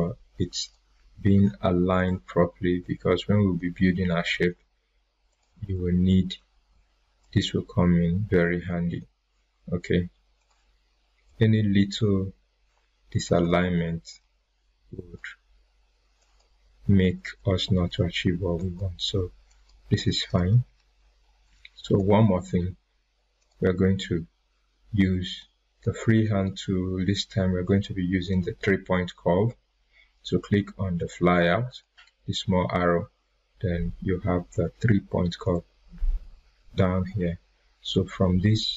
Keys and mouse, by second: 5.6 right click, 7.2-12.2 drag, 13.4 right click, 14.9 click, 17.0 right click, 18.5 click, 21.2 right click, 21.4-22.0 drag, 30.9 click, 35.4 click.